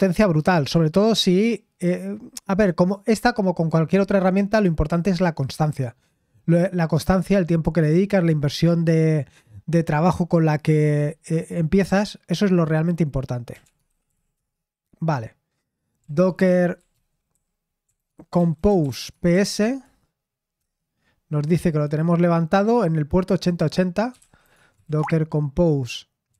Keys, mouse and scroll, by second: 13.3-14.6 typing, 16.0-20.6 typing, 23.9-26.3 typing.